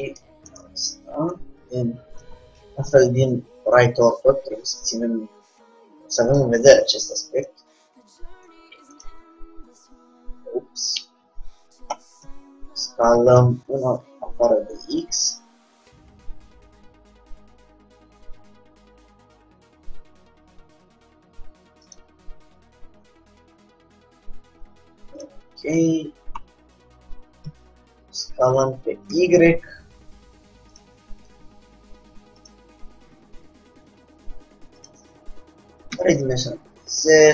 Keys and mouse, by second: 0.6 middle click, 1.4 KP_3, 4.5 g, 6.8 r, 7.8-9.1 drag, 9.4 s, 12.4 s, 22.7 g, 25.4-27.5 drag, 25.5 g, 27.6 s, 31.4 r, 32.8 g, 34.9 click, 36.1 s.